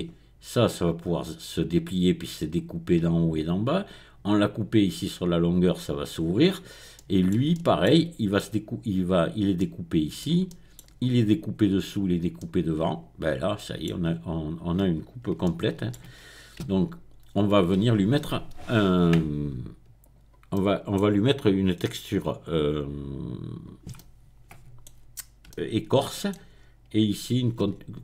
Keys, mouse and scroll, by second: 5.1-6.2 middle drag, 6.2-6.9 scroll up 2, 8.0-14.0 shift+middle drag, 14.0-14.7 scroll down 1, 15.4 shift+middle click, 16.8 Tab, 17.2-18.1 scroll down 2, 19.1 right click, 20.0 click, 26.5-27.5 scroll up 2, 27.7 Tab.